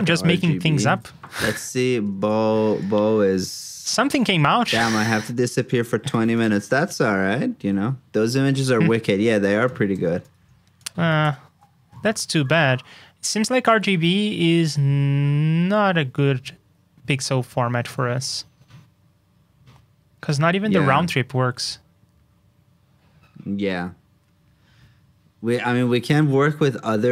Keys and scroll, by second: 0.8 super+c, 1.2 super+j, 6.1 super+c, 6.6 super+v, 11.2 super+j.